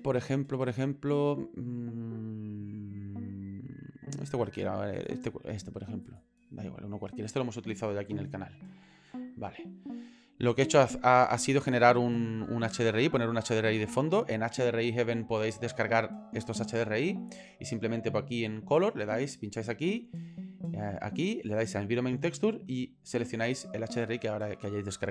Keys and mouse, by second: 11.1 middle click, 11.9 middle click, 13.5 middle click, 20.2 click, 20.7-22.3 drag.